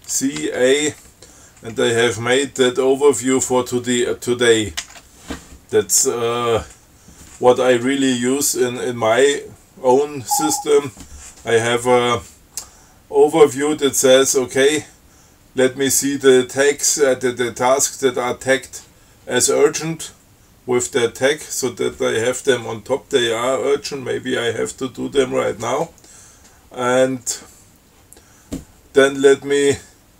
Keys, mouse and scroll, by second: 0.7 ctrl+a, 5.1 shift+d.